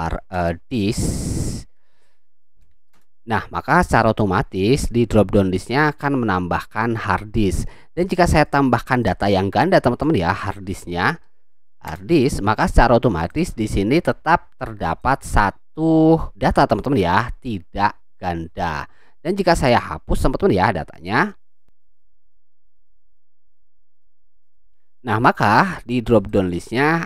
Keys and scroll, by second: 0.0-2.3 typing, 2.9 Return, 10.3-11.7 typing, 11.9 Return.